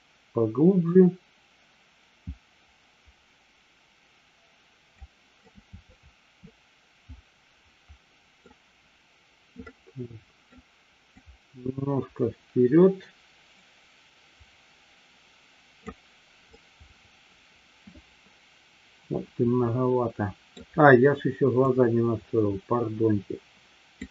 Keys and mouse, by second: 5.5-8.3 middle drag, 9.7-10.5 middle drag, 11.2-16.2 drag, 16.6-20.6 middle drag, 21.6-24.1 drag.